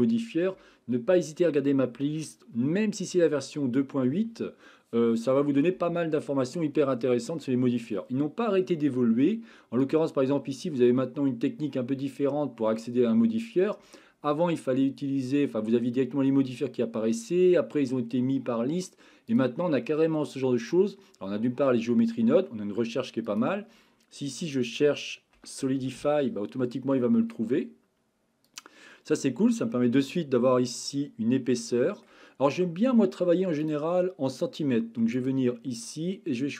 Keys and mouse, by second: 9.9-16.4 drag, 19.5-28.6 drag, 29.6-30.1 middle drag, 31.7-32.1 shift+middle drag, 35.1 click.